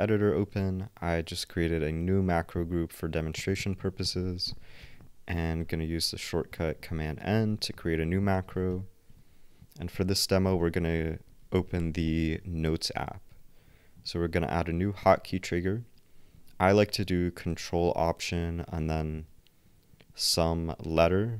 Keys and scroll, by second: 4.8 super+n, 8.2 shift+o, 10.4 shift+n.